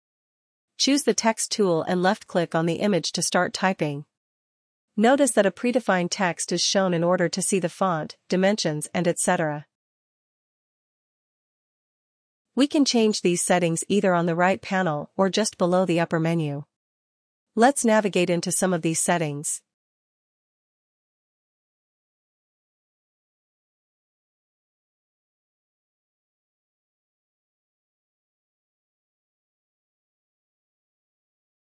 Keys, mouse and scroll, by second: 2.2 click, 6.9 ctrl++, 7.1 ctrl++, 7.3 ctrl++, 12.6 click, 12.8 click, 17.1 click, 18.9 click, 21.9 click, 24.2 ctrl+-, 24.2 middle click, 24.4 ctrl+-, 24.7 ctrl+-, 25.5 ctrl+-, 30.1 click, 30.6-31.7 drag.